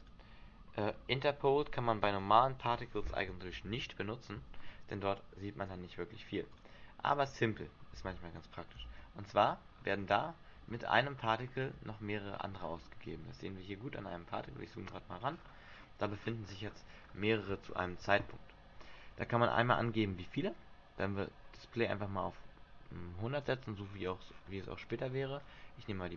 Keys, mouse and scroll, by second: 0.2 click, 2.4 click, 3.8 alt+a, 5.5 Escape, 6.6 click, 8.2 alt+a, 9.0 alt+a, 9.3-9.7 scroll down 3, 9.7-10.6 scroll up 7, 10.3 shift+middle click, 11.0-11.4 scroll up 3, 11.6 shift+middle click, 11.9-12.8 scroll up 3, 13.0 shift+middle click, 13.3 scroll up 3, 14.2 shift+middle click, 14.9 scroll up 2, 15.4-17.9 scroll down 23, 17.9 shift+middle click, 20.3 click, 24.0-25.6 scroll up 9, 25.6-26.1 scroll up 3.